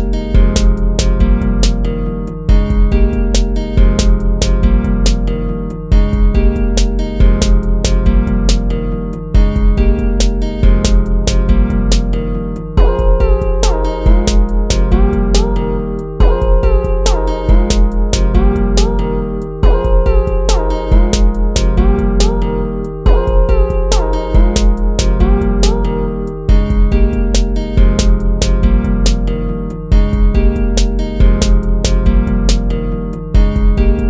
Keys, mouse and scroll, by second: 2.5 ctrl+-, 2.8 ctrl++, 7.9 ctrl+-, 8.4 ctrl++, 16.0 ctrl+-, 17.4 ctrl++, 18.3 ctrl+-, 18.8 ctrl++, 19.8 ctrl+-, 20.1 ctrl+-, 20.4 ctrl++, 22.5 ctrl+-, 22.6 ctrl++, 22.9 ctrl++, 27.8 ctrl+-, 28.1 ctrl++, 29.8 ctrl+-, 30.7 ctrl+-, 33.4 ctrl+-.